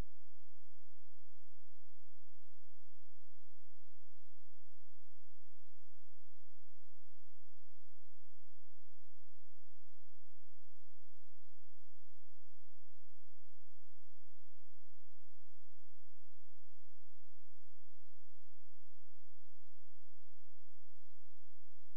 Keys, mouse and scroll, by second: 0.8-2.6 scroll up 1, 2.7-3.4 scroll down 1, 3.9 click, 5.9 shift+click, 7.9 ctrl+s, 9.2-10.2 scroll up 1, 11.7 click, 13.1 ctrl+s, 14.8 ctrl+click, 15.8-16.4 scroll down 1, 16.4 click, 19.6-20.0 scroll up 1.